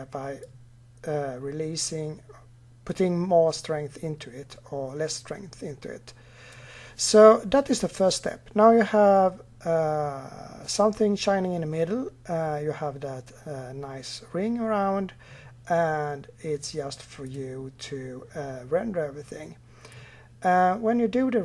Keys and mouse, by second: 17.0-18.9 drag, 19.7-21.4 drag.